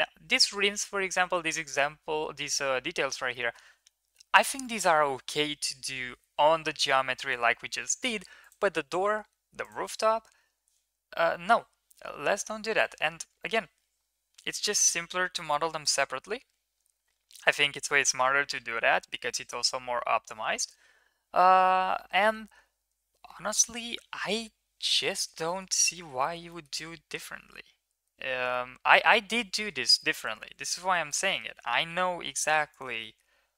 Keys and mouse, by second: 3.3 middle click, 8.4 click, 9.6 click, 25.1 shift+middle drag, 25.4 middle drag, 26.2 shift+middle drag, 26.5 middle drag, 28.5-28.9 middle drag, 30.0 middle click, 30.9 shift+middle drag, 31.3 middle click, 31.5 Tab, 32.2 Tab, 32.7 drag, 33.0 middle click, 33.2 Tab.